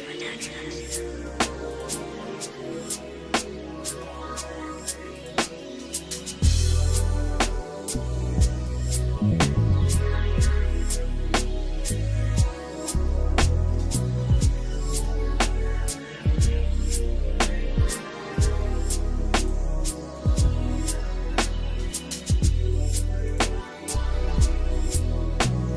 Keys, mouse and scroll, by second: 0.2 middle click, 0.8 shift+middle click, 1.7 click, 2.1 Tab, 2.9-3.9 shift+middle drag, 4.2 middle click, 4.7 Tab, 5.2 click, 5.6-6.7 shift+middle drag, 6.9 middle click, 7.5-8.6 shift+middle drag, 9.3 scroll up 2, 9.8-11.8 shift+middle drag, 12.1 middle click, 12.6 middle click, 13.1 shift+middle click, 14.0 middle click, 14.6 shift+middle click, 15.2 middle click, 15.7 middle click, 16.3 shift+middle click, 17.8 shift+middle click, 19.4 click, 20.4 shift+middle click, 23.6 click.